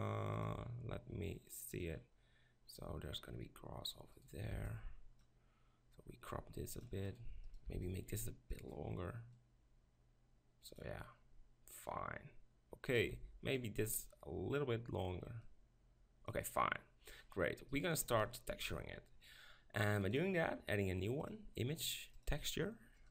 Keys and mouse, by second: 4.1-5.9 right drag, 4.6 b, 5.9-7.1 drag, 7.1 middle click, 7.7-9.3 drag, 7.7 b, 9.3 middle click, 9.4-11.0 drag, 12.9 right click, 13.1-17.2 drag, 13.1 b, 17.2 middle click, 17.7 right click, 18.5 ctrl+KP_Decimal, 20.1-23.1 drag.